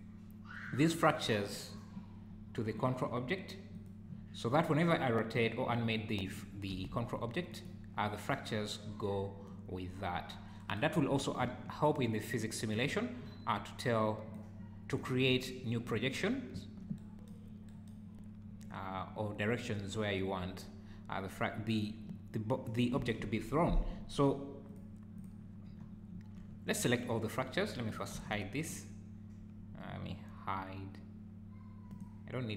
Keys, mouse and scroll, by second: 1.2 click, 2.3-2.8 scroll up 3, 2.8 click, 3.8 click, 4.4-5.4 scroll up 4, 5.4 click, 6.7 r, 11.2 scroll down 3, 11.4 `, 12.3 click, 12.7-13.2 scroll down 4, 25.8-26.1 scroll up 5, 26.1 `, 27.9 click, 28.1 h, 28.6 click, 31.9 click.